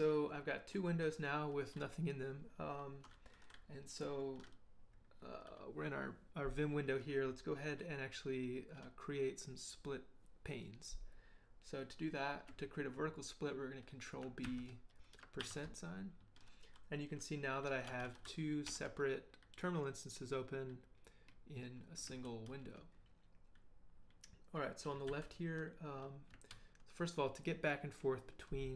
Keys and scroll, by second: 14.4 ctrl+b, 15.4 shift+5, 17.9 ctrl+h, 18.0 ctrl+l, 18.7 ctrl+l, 22.1 ctrl+h, 22.5 ctrl+l, 25.1 ctrl+h, 26.5 ctrl+l.